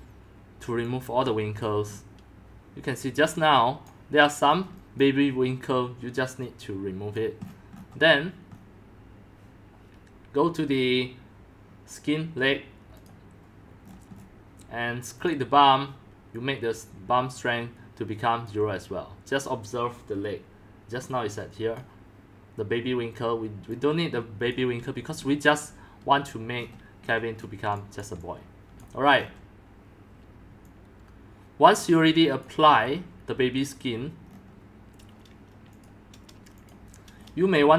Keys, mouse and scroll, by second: 0.8 x, 1.4 c, 1.6 drag, 1.9-3.4 scroll down 3, 3.4-3.8 middle drag, 3.8 click, 4.4 middle click, 4.6 scroll down 3, 5.0 click, 6.4-7.4 drag, 7.4-7.9 scroll down 11, 8.5 scroll down 3, 11.1 scroll, 12.8 scroll down 10, 13.0-13.8 drag, 13.8-15.2 scroll down 10, 15.2-19.9 drag, 21.2-21.8 drag, 23.6-26.5 drag, 24.5-25.7 typing, 26.5-27.4 scroll down 9, 27.4 middle click, 27.4 scroll, 27.7 x, 28.0-29.3 drag, 28.5 c, 28.6 c, 28.8 c, 29.3 scroll down 6, 29.4 scroll up 6, 29.6 scroll down 1, 29.7 scroll up 1, 29.9-30.6 scroll down 1, 30.6-31.2 scroll up 3, 31.2-32.4 scroll down 1, 32.4-34.2 drag, 34.2 scroll down 5, 35.8 drag, 36.5 click.